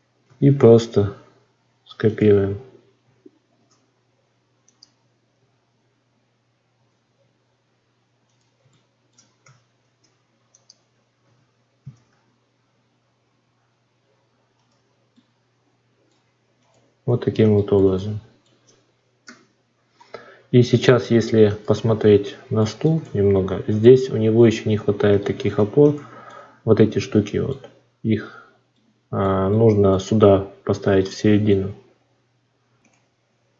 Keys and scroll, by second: 0.1 r, 3.4 shift+d, 9.7 shift+d.